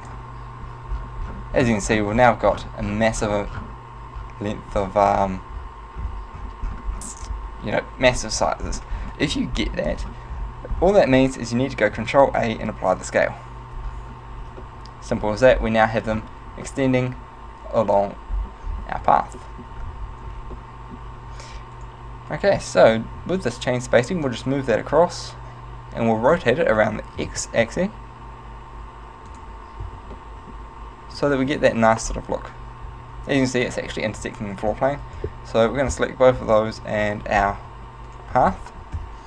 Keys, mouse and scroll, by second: 0.9-3.3 scroll down 18, 3.3 scroll down 9, 4.3-4.9 scroll down 5, 4.9 scroll down 3, 5.6-6.5 scroll down 7, 6.1-7.1 scroll up 5, 7.1-8.7 scroll up 10, 8.7-12.0 scroll up 24, 12.0 ctrl+a, 14.0-14.7 scroll down 2, 14.7 shift+middle click, 14.7-15.6 scroll down 2, 15.6-17.9 scroll down 6, 17.9 shift+middle click, 18.4-19.4 scroll up 5, 19.4 shift+middle click, 19.4-20.4 scroll up 2, 20.4 scroll up 2, 20.7 shift+middle click, 21.9 right click, 22.5 right click, 24.3 click, 27.3 r, 29.5 click, 29.9 z, 30.2 middle click, 30.8-31.2 scroll up 1, 31.4 shift+middle click, 32.1-32.6 scroll down 4, 34.3 z, 35.1 shift+right click, 36.4-37.1 scroll down 3, 37.5-38.1 scroll down 2, 38.1 shift+right click, 39.1 KP_1.